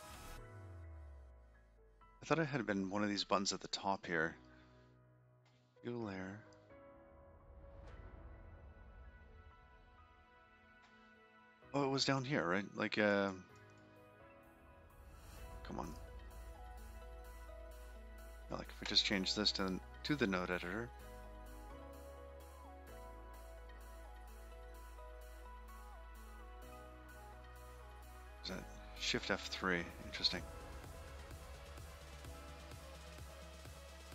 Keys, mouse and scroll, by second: 1.1 click, 1.5-3.3 scroll up 26, 8.1 click, 8.5 click, 9.8 click, 12.3 click, 13.8 click, 14.2 click, 14.9 click, 16.3 click, 16.5 click.